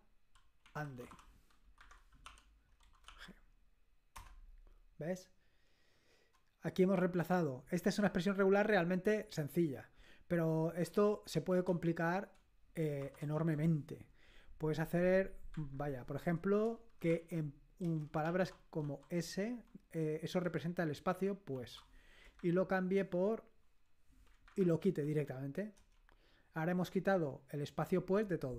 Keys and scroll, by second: 0.4-3.1 typing, 4.2 Return, 13.0-13.4 typing, 15.6 /, 17.1 super+°, 17.9-18.8 typing, 20.5-22.4 typing, 24.5 /, 24.8 g, 25.8 Return, 25.9 typing.